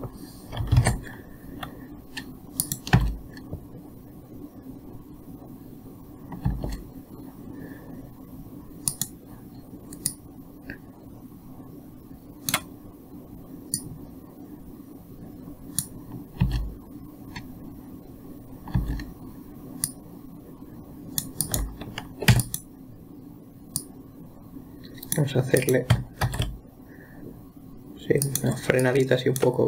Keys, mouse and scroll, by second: 1.2 alt+a, 3.1 click, 3.4 space, 6.9 space, 9.3 click, 10.5-13.6 drag, 14.2 click, 16.8 space, 19.2 space, 20.3-22.0 drag, 22.7 x, 24.2-26.1 drag, 26.7 shift+d, 29.3-29.6 drag.